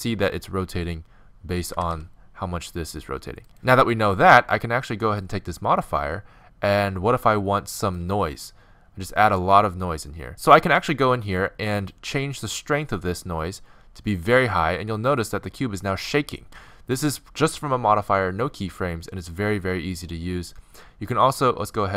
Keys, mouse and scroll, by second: 1.8 g, 3.5-7.1 drag, 10.3 Home, 11.9-15.9 drag.